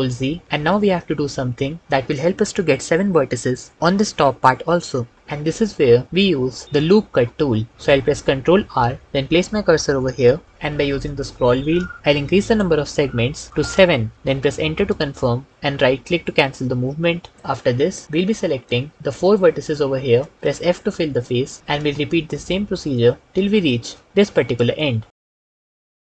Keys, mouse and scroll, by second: 8.4 ctrl+r, 12.2 s, 13.5 KP_7, 14.8 KP_Enter, 20.3 f, 25.1-26.1 typing, 25.7 ctrl+z.